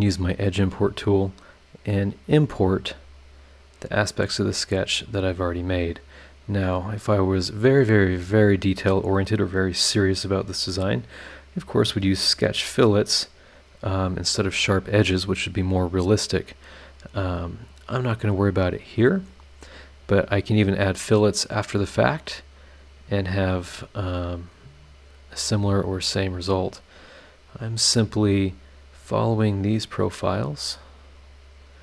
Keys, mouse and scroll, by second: 0.5 click, 0.9 click, 2.5 click, 3.1 click, 4.5 click, 5.1 click, 5.9 click, 7.1 click, 17.6 click, 18.5 click, 19.6 click, 23.2 click, 24.8 click, 27.0 click, 28.4 click, 30.1 click, 31.2 click.